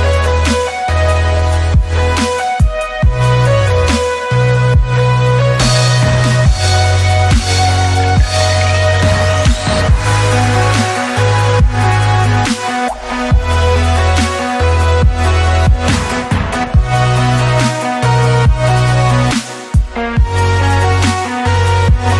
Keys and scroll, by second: 3.1 Escape, 4.7 ctrl+z, 11.2 alt+w, 11.3 f, 11.4 Escape, 14.7 Escape, 16.5 Escape, 18.5 w, 18.7 Escape, 20.0 Escape.